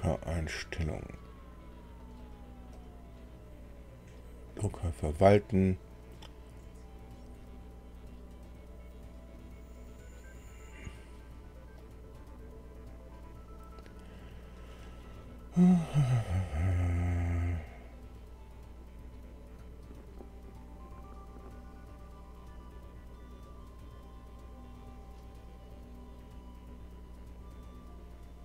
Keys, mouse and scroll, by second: 0.5 click, 2.0 click, 2.7 click, 4.5 click, 9.3 click, 10.8 click, 11.7 right click, 21.8 click, 23.4 click, 25.4 click, 28.0 click.